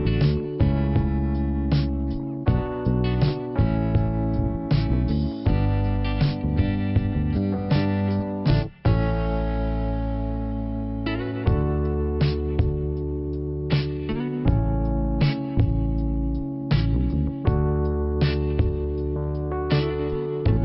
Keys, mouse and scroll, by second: 0.5 click, 0.8-1.1 scroll down 1, 2.8 click, 2.9 click, 3.4 click, 3.4 click, 4.6 click, 4.7 click, 5.3 click, 6.2 click, 7.1 click, 8.9-9.4 scroll down 1, 10.3 click, 11.3 click, 13.4 click, 14.2 click, 16.0 click, 16.0 ,, 19.3 shift+Return, 20.5 scroll down 2.